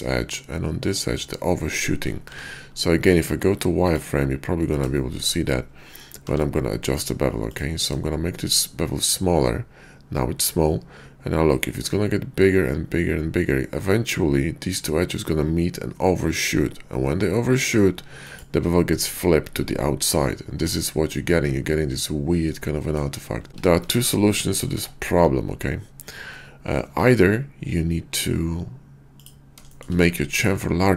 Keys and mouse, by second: 2.2 q, 4.9 shift+click, 18.2 shift+click, 21.0-23.0 middle drag, 23.5 ctrl+z, 23.9 ctrl+z, 24.7 Tab, 26.8 q, 29.7 shift+drag.